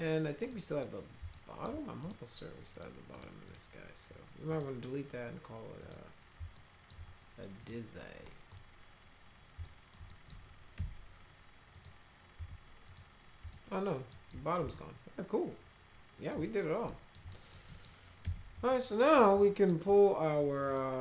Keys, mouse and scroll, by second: 0.5 middle click, 1.3 alt+middle click, 2.0 click, 2.7 click, 3.1 click, 3.5 click, 4.5 click, 5.8 click, 6.5 alt+middle click, 7.6 click, 8.5 click, 9.6 alt+middle click, 10.1 middle click, 10.7 F3, 11.7 click, 12.9 click, 13.5 alt+middle click, 14.3 middle click, 14.7-16.3 alt+middle drag, 16.4 middle click, 16.9 alt+middle click, 17.3 middle click, 17.7 middle click, 18.2 F3, 18.5 F4, 19.4 alt+middle click, 20.6 click.